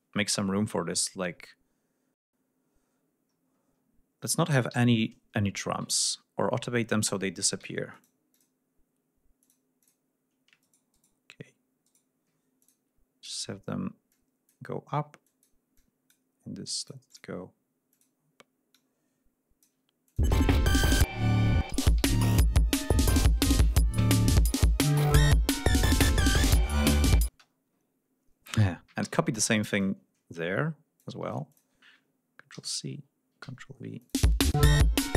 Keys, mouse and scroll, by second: 0.7 scroll up 2, 2.2-3.7 scroll up 6, 3.9-4.3 scroll up 2, 4.3 scroll down 2, 4.7 g, 5.3-6.0 scroll up 4, 6.3 ctrl+scroll up 2, 7.6 d, 7.9 click, 8.3 click, 9.4 click, 9.8 click, 10.6 shift+right click, 11.8 shift+right click, 12.6 shift+click, 13.2 click, 14.1 click, 15.2 click, 15.7 click, 16.8 click, 17.9 click, 18.7 click, 20.0 click, 20.2 space, 22.7 ctrl+scroll down 2, 23.9-24.7 scroll down 2, 24.9-25.2 scroll up 2, 26.5 scroll down 2, 27.3 space, 27.5-27.9 scroll up 2, 29.0 r, 29.8-31.2 drag, 31.5 ctrl+click, 32.5 ctrl+c, 33.4 ctrl+v, 34.0 ctrl+click, 34.2 space, 34.4 click.